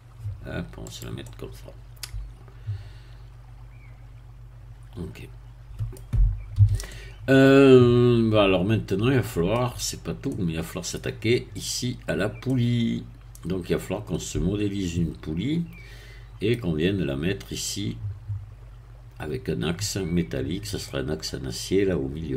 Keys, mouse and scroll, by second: 0.9 click, 1.2-6.1 middle drag, 6.6 a, 6.9-9.7 middle drag, 10.0 scroll up 1, 10.3 middle click, 12.4-16.9 middle drag, 20.8-22.3 middle drag.